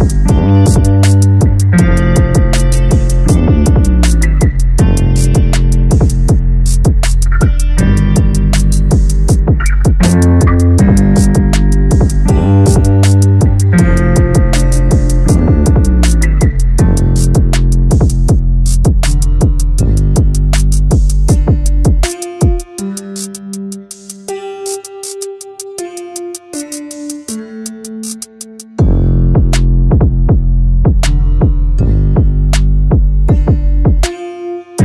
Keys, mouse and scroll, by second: 0.2 2, 0.5 click, 0.8 g, 1.8 click, 2.2 g, 4.5 click, 5.0 g, 7.2 a, 8.3 2, 8.5 2, 8.7 click, 8.9 click, 9.2 ctrl+x, 10.2 a, 10.3 a, 10.7 click, 11.1 g, 12.2 a, 12.7 Tab, 13.7-14.1 scroll down 1, 14.1 a, 14.3 a, 16.0 `, 26.7 `, 29.3 click, 29.5 a, 29.7 a, 30.0 scroll up 1, 30.5-31.0 middle drag, 31.0 scroll up 1, 31.6-33.5 shift+middle drag, 33.5 click, 34.3 3, 34.5 click.